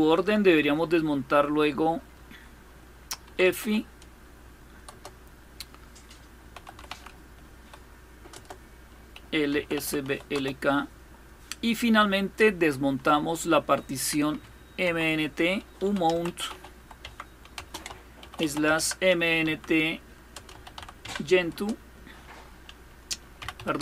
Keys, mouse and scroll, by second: 0.0-0.2 typing, 2.7-3.8 typing, 4.6 Return, 6.0-7.2 typing, 8.0 Return, 8.6-10.3 typing, 14.1 Up, 14.6 Down, 15.2-20.9 typing, 16.6 Tab, 18.4 Tab, 21.2 Return, 22.8-23.5 typing.